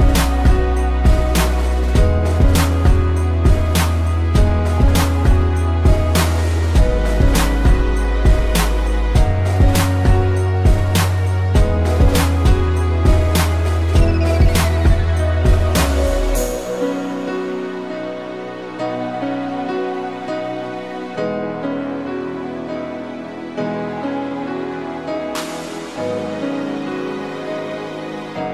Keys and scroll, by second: 0.4 space, 2.8 space, 4.9 a, 6.7 ctrl+s, 12.4 space, 14.9 z, 17.9 a.